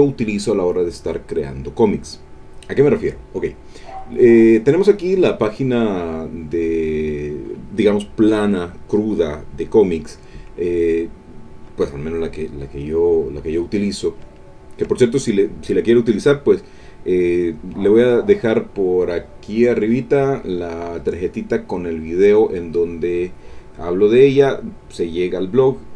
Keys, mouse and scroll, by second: 10.7-11.8 drag, 12.9 click, 13.8 click, 14.3 ctrl+click, 15.2 ctrl+click.